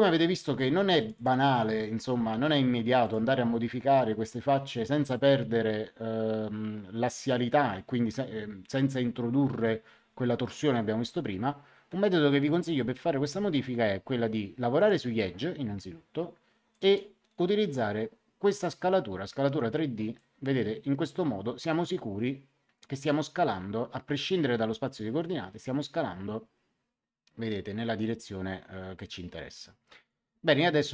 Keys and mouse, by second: 0.9 click, 3.0 click, 14.7 click, 16.7 click, 20.1 click.